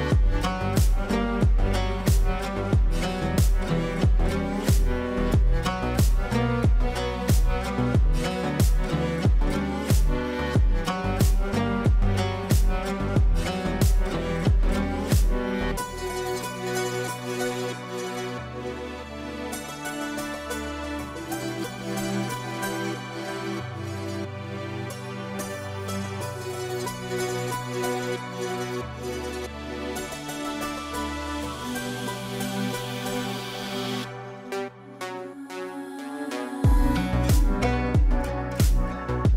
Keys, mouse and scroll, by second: 0.6 click, 1.3 F3, 1.6 F2, 2.0-6.9 drag, 6.9 ctrl+right click, 8.6 shift+click, 9.8 r, 11.3 click, 14.0 e, 14.9 F3, 16.7 F2, 17.0-18.6 drag, 18.6 F2, 18.9 click, 24.9 space, 25.8 click, 27.6 space, 28.4 shift+click, 29.3 c, 29.6 click, 31.1 F3, 31.8 F2, 31.9-34.0 drag, 36.4 space, 37.6 right click.